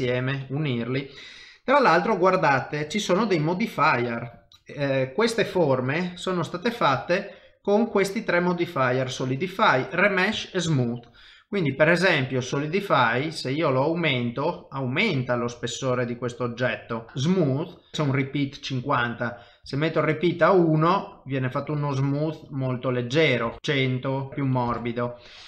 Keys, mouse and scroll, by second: 0.1 shift+middle click, 2.9 click, 4.5 middle click, 5.3 click, 5.6 shift+middle click, 6.7 click, 10.3 middle click, 10.7 shift+middle click, 11.6 click, 16.0 middle click, 17.8 click, 17.9 middle click, 18.7 click, 20.9 middle click, 23.6 click, 23.6 KP_0, 24.2 click.